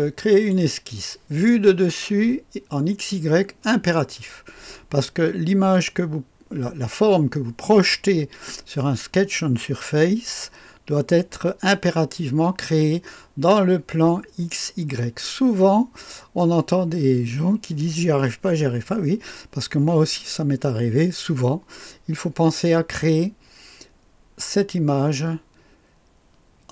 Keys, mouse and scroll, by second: 0.3 click.